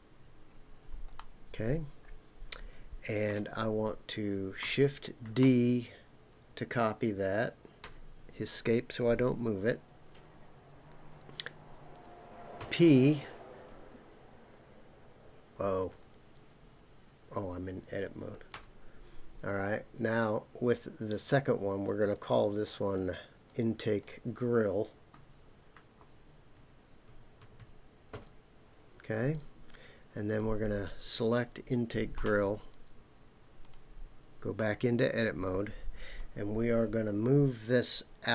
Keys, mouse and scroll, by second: 0.5-1.1 scroll up 2, 1.1-3.3 middle drag, 5.3 shift+d, 7.8 Escape, 12.6 p, 18.5 Tab, 20.1 click, 21.8 click, 22.1 click, 27.6 l, 30.3 click, 32.2 Tab, 33.6 click, 34.6 Tab.